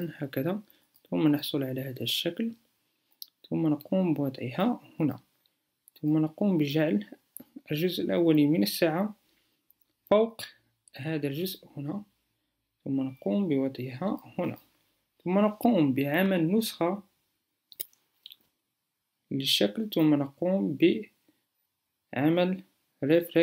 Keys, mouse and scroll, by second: 18.4-23.4 alt+drag.